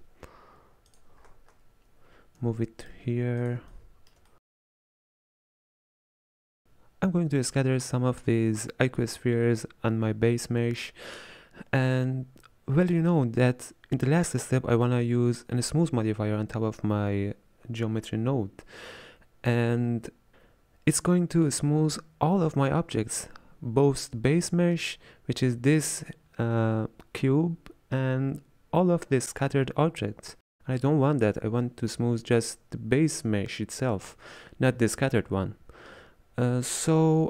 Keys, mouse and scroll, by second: 1.3-2.5 scroll up 7, 2.5 g, 4.4-5.3 middle drag, 5.6-6.6 shift+middle drag.